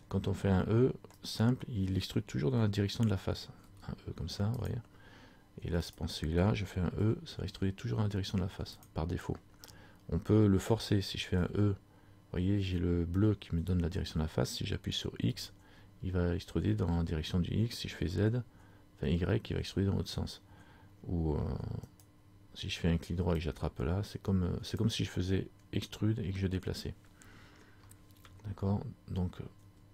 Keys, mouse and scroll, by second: 1.4 right click, 3.8 e, 6.0 right click, 7.2 e, 23.6 click, 28.4 ctrl+z.